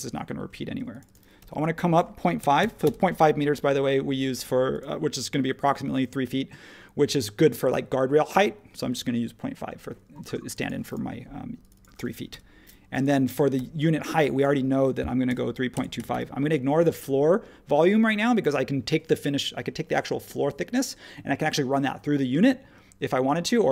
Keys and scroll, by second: 1.4-3.1 typing, 4.2 space, 10.1 space, 12.3 Return, 13.5 p, 15.2-16.6 typing.